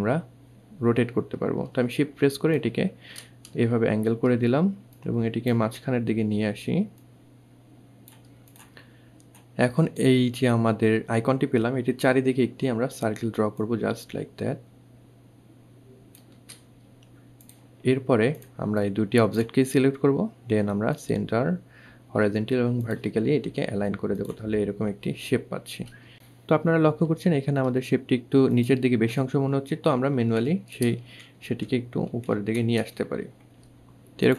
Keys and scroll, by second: 29.3 Up, 29.5 Right, 30.0 shift+Right, 30.2 shift+Up, 30.6 Right, 31.3 Up, 31.6 Right.